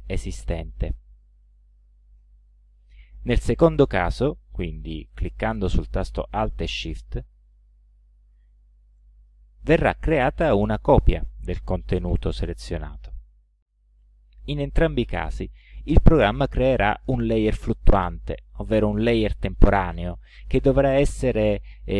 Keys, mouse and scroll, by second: 1.8 ctrl+z, 7.5-8.5 alt+shift+drag.